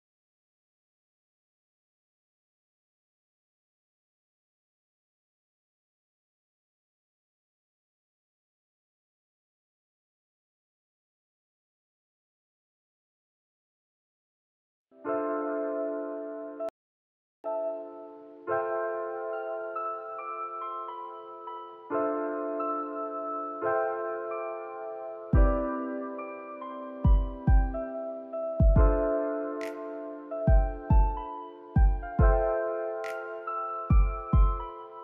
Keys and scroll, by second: 13.4 space, 15.0 space, 15.4 ctrl+s, 18.0 space, 21.4 alt+z, 28.0 space, 30.2 space.